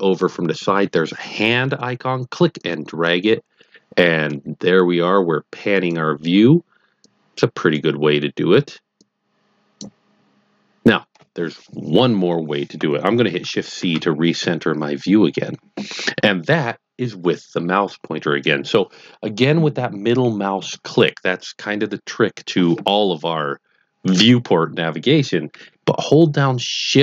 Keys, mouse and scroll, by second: 6.9 click, 9.0 click, 13.8 shift+c.